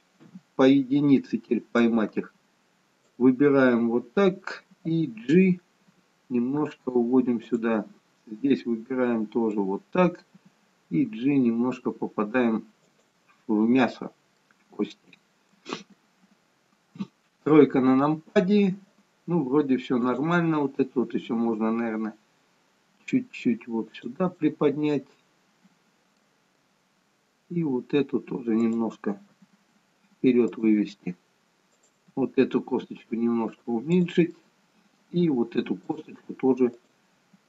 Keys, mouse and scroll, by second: 0.2 KP_1, 1.8 click, 6.1 g, 8.6 click, 10.4 g, 14.4 middle click, 16.9 KP_3, 21.2 click, 21.2 g, 24.4 middle click, 28.6 click, 29.3 g, 31.9 click, 32.2 g, 34.3 middle click, 36.8 click, 37.1 g.